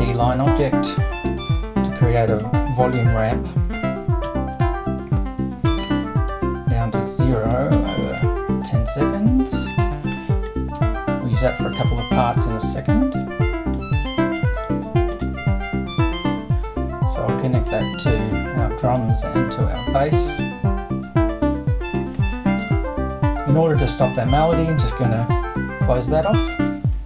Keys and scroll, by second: 1.3 super+2, 3.7 0, 4.6 3, 5.8-8.2 typing, 26.3 BackSpace.